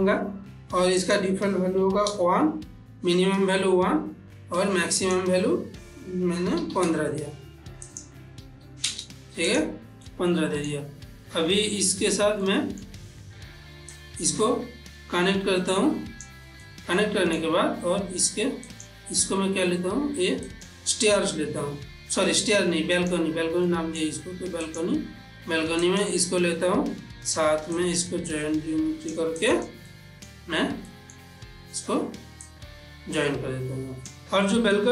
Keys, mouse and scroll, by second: 1.0 click, 4.9 click, 7.8 click, 9.4 click, 10.0-12.2 middle drag, 12.3 middle click, 12.4-13.9 ctrl+middle drag, 13.9-16.6 drag, 16.6 middle click, 18.7 click, 20.4 click, 22.9 click, 23.7 middle click, 24.6 click, 25.8 click, 27.7-29.4 drag, 29.8 middle click, 32.5-34.2 drag, 34.5 ctrl+middle click.